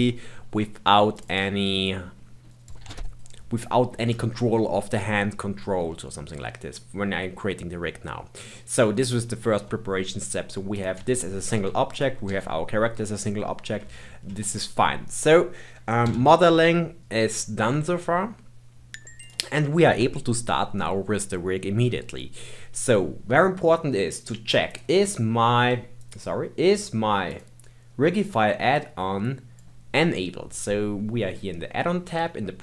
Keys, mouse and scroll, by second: 1.1-2.7 drag, 3.1 click, 3.8-4.1 scroll down 1, 4.1 shift+middle click, 4.7-5.9 scroll down 1, 5.9-9.1 middle drag, 9.1 click, 10.7 click, 10.9 g, 11.9 click, 12.3 g, 14.0-16.1 shift+middle drag, 16.1 KP_1, 17.0-19.2 shift+middle drag, 19.2 click, 24.7-27.7 drag.